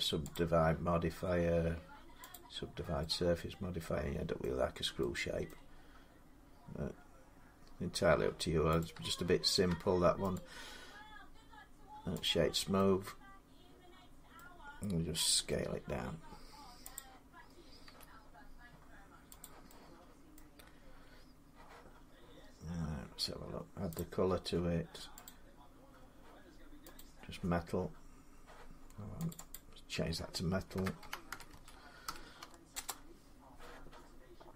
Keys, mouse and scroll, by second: 0.1 click, 2.1 click, 4.2 middle click, 5.3 middle click, 8.6 right click, 9.5 Tab, 10.1 right click, 12.0 click, 14.1 middle click, 15.2 s, 16.8 click, 17.2 scroll, 17.6 scroll up 5, 17.6 s, 19.2 click, 20.1 middle click, 20.1 scroll, 20.4-21.4 scroll down 5, 23.8 click, 25.0 click, 26.8 click, 29.1 click, 29.3 click, 30.5-31.9 typing, 32.5 Return, 34.3 typing.